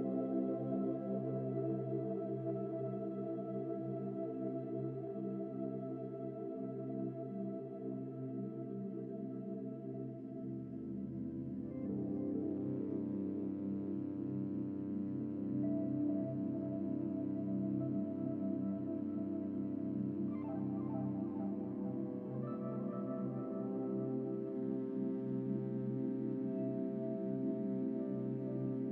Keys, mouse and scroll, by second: 1.2-2.5 drag, 14.0 scroll down 3, 14.2-14.6 shift+middle drag, 14.6 drag, 14.9 Tab, 15.3 click, 16.0 scroll down 5, 16.3 scroll up 4, 16.7 scroll down 1, 17.4 a, 21.4-21.8 scroll up 4, 21.8-23.6 shift+middle drag, 26.3 g.